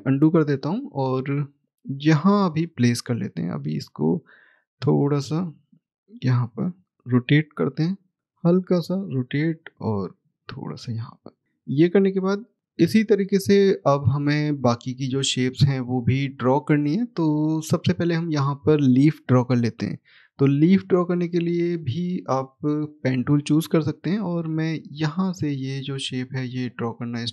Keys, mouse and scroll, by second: 1.3-1.8 scroll down 1, 1.8 middle click, 2.9 click, 9.5-10.1 scroll up 1, 10.1 click, 11.6-12.6 scroll down 1, 13.8-14.7 scroll up 1, 14.7 click, 17.3 middle click, 19.0 scroll down 1, 19.9 middle click, 20.7-22.8 scroll up 1, 22.8 click, 24.0-26.7 scroll up 1, 26.7 click.